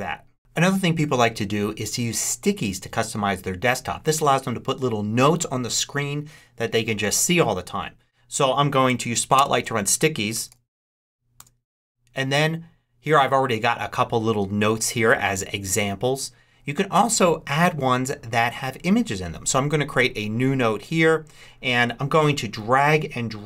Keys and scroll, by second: 10.1-11.4 typing.